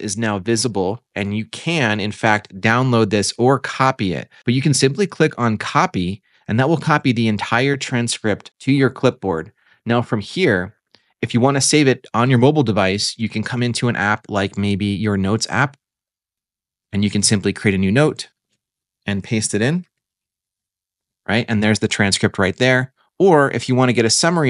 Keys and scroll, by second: 19.7 super+v.